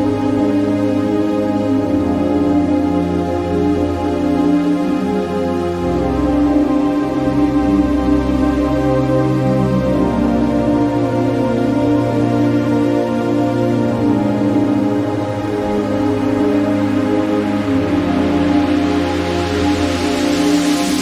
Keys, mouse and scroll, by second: 0.4 Down, 1.1 Right, 1.3 typing, 5.0 click, 5.5 right click, 6.6 click, 9.3 click, 11.2-14.1 drag, 14.3-21.0 drag.